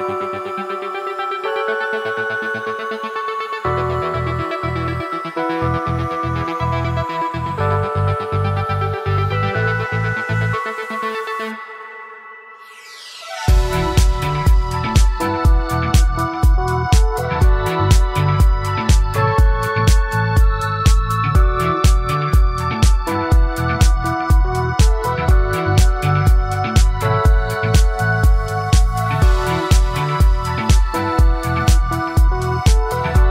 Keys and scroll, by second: 10.8 ctrl+z, 22.9 ctrl+z, 31.0 ctrl+z.